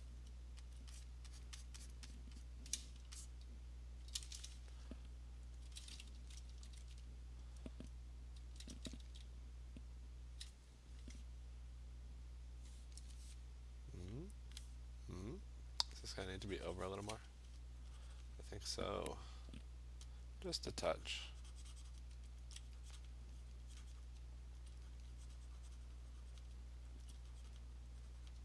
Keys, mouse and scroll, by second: 0.7-2.8 alt+click, 1.0 click, 1.4 click, 1.7 click, 1.9 click, 2.1 alt+click, 2.2 click, 2.4 click, 4.0 click, 5.6 alt+click, 6.2 [, 6.5 [, 6.8 [, 8.4 [, 8.7 [, 9.0 [, 17.0 click, 17.8 click, 18.2 click, 20.2 alt+click, 20.6 alt+click, 20.7 alt+click, 22.0 click, 22.4 alt+click, 23.1 click, 23.5 click, 24.1 click, 24.4 alt+click, 24.6 alt+click, 25.0 click, 26.4 click, 27.0 alt+click, 27.6 click, 28.3 click.